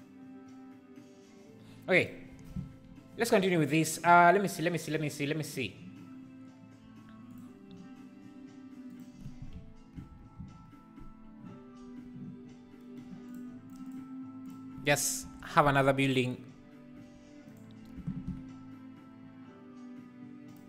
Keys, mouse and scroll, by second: 7.4 click, 10.3 KP_0, 13.8 click, 14.5 click, 15.6 shift+d, 16.9 r, 18.1 shift+d.